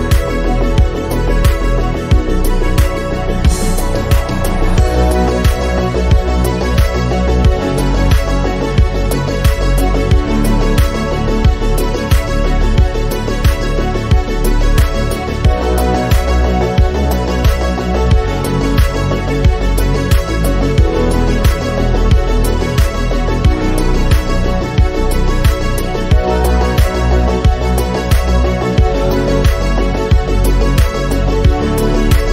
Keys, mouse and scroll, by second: 0.4 KP_7, 0.6 scroll up 5, 1.0 click, 5.4 click, 6.6 scroll down 4, 6.8 click, 7.5 click, 7.6 click, 8.2 click, 8.4 scroll up 3, 8.6 click, 10.3-10.9 scroll down 1, 10.9 middle click, 11.1 scroll down 1, 11.3 shift+middle click, 11.8 click, 12.7 click, 14.9 KP_7, 15.1-15.6 scroll up 3, 15.6 click, 17.0 scroll down 2, 17.2 click, 17.6 scroll down 1, 17.8 middle click, 18.1 scroll up 6, 18.4 click, 22.8-24.8 right drag, 24.8-26.2 drag, 26.2 KP_Decimal, 27.5 click, 27.9 n, 28.8-30.1 drag, 30.1 o.